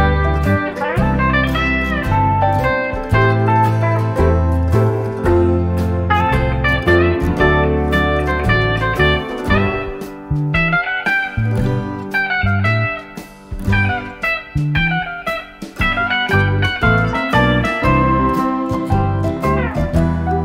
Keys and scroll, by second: 12.1 F1, 12.9 -.